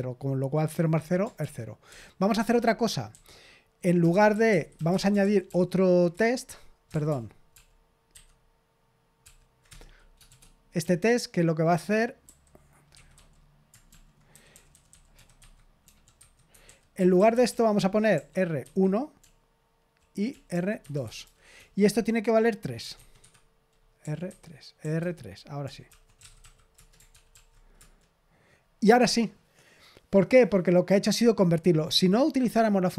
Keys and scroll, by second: 1.3 ctrl+p, 1.8 ctrl+p, 2.3 Return, 3.5-5.2 typing, 5.4 ctrl+p, 6.1 Return, 6.9 ctrl+p, 7.0 ctrl+p, 7.5 ctrl+p, 8.1 ctrl+n, 9.2 ctrl+p, 9.6 Return, 10.2-26.4 typing, 26.7 Return, 27.1 ctrl+p, 27.3 ctrl+p, 27.7 Return.